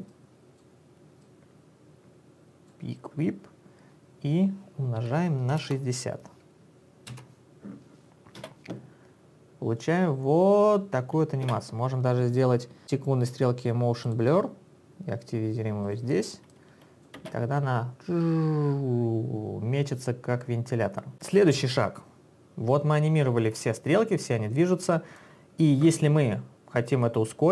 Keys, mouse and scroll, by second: 0.1 click, 1.4 click, 5.2-6.1 typing, 7.1 Return, 8.6 space, 11.5 space, 14.1 click, 15.8 click, 16.5 click, 17.2 space, 24.3 click, 27.3 click.